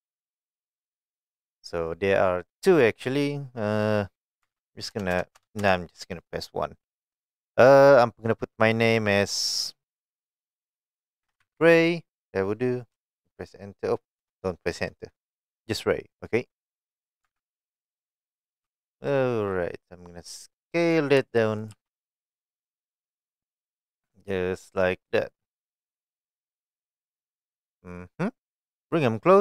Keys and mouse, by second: 0.4 click, 4.4 Tab, 4.9 BackSpace, 5.1 BackSpace, 5.4 BackSpace, 5.6 BackSpace, 11.2 shift+r, 11.4 a, 11.6 y, 13.0 Return, 14.2 BackSpace, 17.3 Tab, 18.6 g, 20.8 click, 21.2 s, 21.6 click, 21.8 g, 24.6 click, 25.8 click, 26.6-28.3 middle drag, 28.9 click.